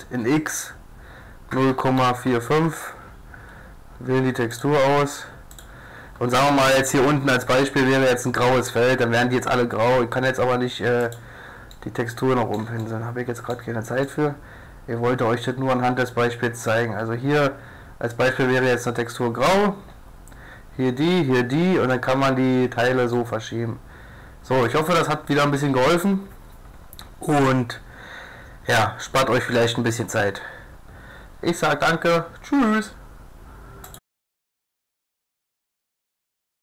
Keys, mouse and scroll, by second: 4.5-6.3 drag, 6.5-8.4 drag, 7.5 g, 11.7-15.8 middle drag, 21.9 middle click, 22.8 middle click, 22.9 a, 23.4-24.9 middle drag, 29.0-30.8 middle drag.